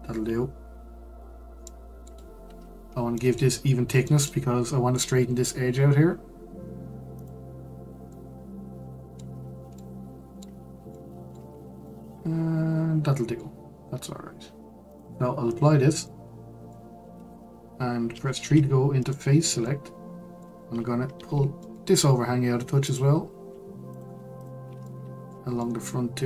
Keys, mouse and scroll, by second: 1.2-1.6 scroll down 3, 1.6-2.3 middle drag, 2.3 scroll up 3, 2.6-3.1 scroll down 4, 3.1-7.1 middle drag, 7.1 click, 8.1-11.5 middle drag, 11.5-11.8 scroll up 1, 11.8-14.9 middle drag, 14.9-15.8 drag, 15.8 scroll down 2, 16.0-17.1 middle drag, 17.1 Tab, 18.4 3, 19.0 click, 19.6-21.1 middle drag, 21.1 g, 23.9 click, 24.4 shift+click, 24.8-26.2 middle drag.